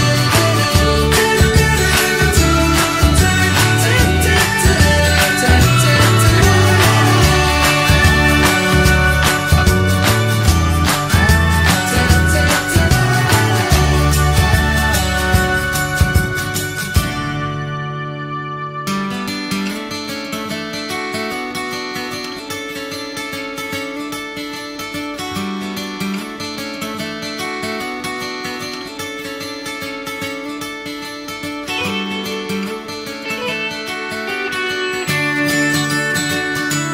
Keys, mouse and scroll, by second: 0.6 click, 1.0-2.3 middle drag, 2.3 click, 2.8 click, 3.2-5.4 middle drag, 5.4 click, 6.4 click, 6.9 shift+click, 8.3 ctrl+l, 10.0 click, 10.4-11.9 middle drag, 11.9 click, 13.2 click, 13.7 middle click, 14.3 scroll up 1, 14.8 shift+a, 17.3 scroll down 2, 17.4 middle click, 17.8 click, 18.5 shift+a, 23.9 click, 24.5-25.8 drag, 26.2 click, 28.1 click, 28.6 scroll up 2, 29.4 click, 30.0 click, 33.5 click, 34.2 click.